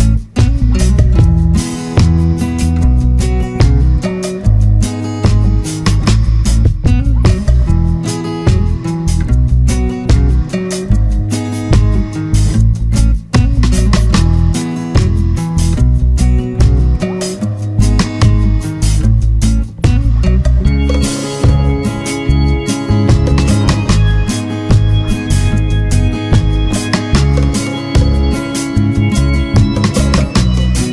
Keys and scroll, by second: 0.6 ctrl+=, 4.3 ctrl+z, 20.9 ctrl+z.